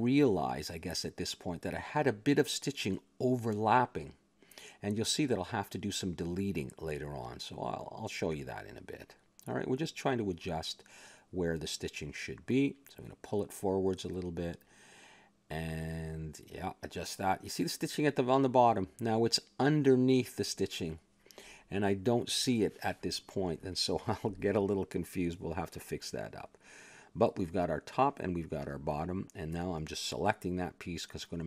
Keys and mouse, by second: 3.6 a, 3.9 middle click, 4.7 click, 5.4 g, 6.8-8.3 middle drag, 8.3-10.0 drag, 10.4 KP_3, 12.2-14.2 middle drag, 14.2 click, 16.1 click, 17.7-18.7 middle drag, 18.7 a, 18.8-23.3 middle drag, 24.3-26.3 middle drag, 26.3 click, 27.5-28.5 middle drag, 28.2 Tab, 28.8 middle click, 29.1 ctrl+Tab, 29.8 click.